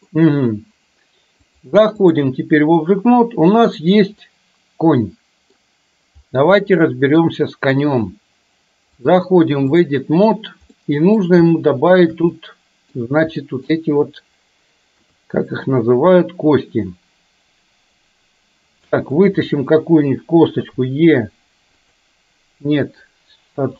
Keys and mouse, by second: 1.6-2.2 drag, 3.7 click, 4.3-5.6 middle drag, 6.7-7.3 middle drag, 9.2-9.9 drag, 10.9 middle click, 11.6 shift+middle click, 12.4 middle click, 13.6 middle click, 15.1 KP_3, 19.2 click, 20.8 e.